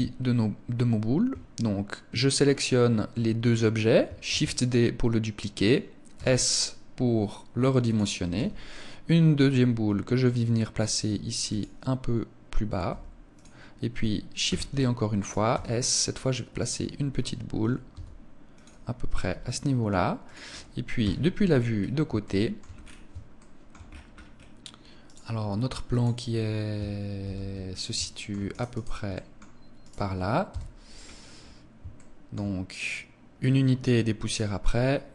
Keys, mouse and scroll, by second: 4.0 shift+d, 5.4 click, 5.9 s, 7.7 click, 8.2 g, 11.4 click, 12.6 g, 13.2 click, 14.2 shift+d, 15.0 click, 15.3 s, 16.3 click, 17.6 s, 18.4 click, 18.9 g, 20.1 click, 20.8 KP_3, 21.5 scroll down 2, 22.0 shift+middle click, 22.5 scroll down 1, 23.1 shift+middle click, 23.1 scroll down 3, 23.6-24.3 scroll up 10, 24.8 right click, 25.6 click, 27.1 shift+c, 27.7 shift+middle click, 28.2 right click, 28.4 right click, 28.9 middle click, 29.6 right click, 30.2 KP_3, 30.8-31.3 scroll up 6, 31.7 shift+middle click, 34.2 right click, 34.6 scroll up 4.